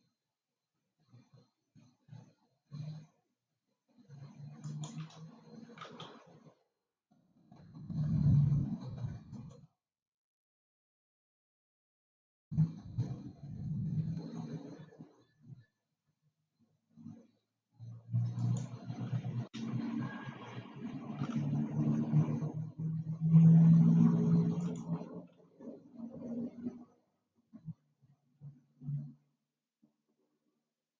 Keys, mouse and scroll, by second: 6.6 r, 10.7 e, 20.2 r, 25.8 e.